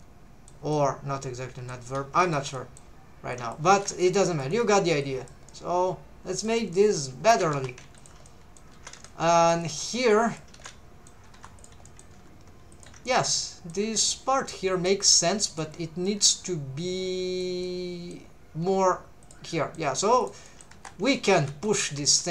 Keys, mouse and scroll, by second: 0.7-1.8 middle drag, 2.2 alt+shift+click, 2.6 middle click, 3.3 click, 3.5 middle click, 3.6 alt+a, 3.9 c, 4.5 right click, 5.0 click, 5.5 middle click, 6.7 middle click, 7.3 alt+a, 7.5 3, 8.0 alt+shift+click, 8.3 middle click, 8.7 alt+a, 8.9 c, 9.6 right click, 10.1 click, 10.7 middle click, 11.3 3, 11.6 click, 11.9 middle click, 12.1 g, 12.7 shift+click, 13.1 middle click, 13.4 middle click, 14.5 middle click, 15.5 middle click, 15.5 click, 15.7 scroll down 1, 16.1-17.5 middle drag, 17.6 middle click, 18.7 g, 19.2 click, 19.5 middle click, 20.2 click, 20.5 middle click, 20.8-22.3 typing, 21.2 click, 21.7 shift+click.